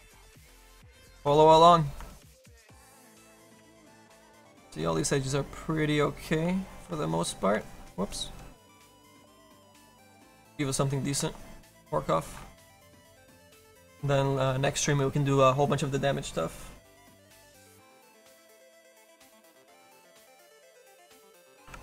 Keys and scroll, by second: 20.7-21.8 typing.